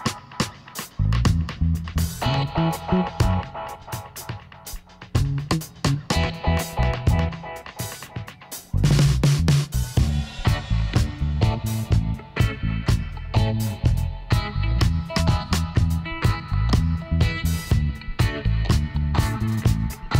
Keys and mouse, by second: 2.0-3.1 right drag, 3.1 middle click, 3.3 right click, 3.9-5.0 middle drag, 6.7 ctrl+z, 7.0 ctrl+z, 7.4 ctrl+z, 7.8 ctrl+z, 8.2 ctrl+z, 8.6 ctrl+z, 8.9 ctrl+z, 9.3 ctrl+z, 10.9-12.7 drag, 16.4 h, 16.9 middle click, 20.0-20.1 middle drag.